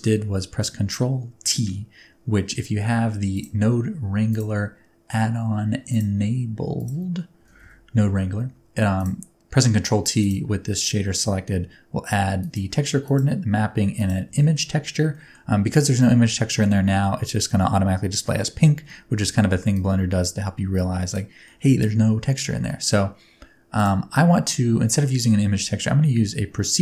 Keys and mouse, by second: 3.4-4.4 middle drag, 10.2 middle click, 12.4 middle click, 13.0 middle click, 14.0 middle click, 14.4 shift+middle click, 15.2 middle click, 19.7 click, 20.7 click, 21.4 middle click, 22.7 middle click, 23.8 click.